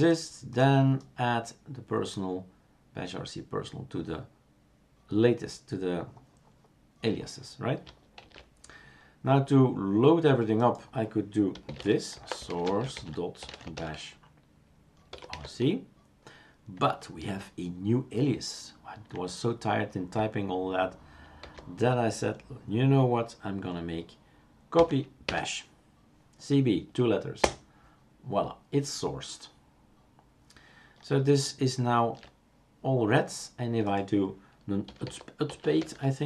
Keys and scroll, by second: 8.2 shift+super+q, 11.5 typing, 13.2-15.2 typing, 21.5 ctrl+c, 24.8 typing, 26.3 typing, 34.6-36.2 typing.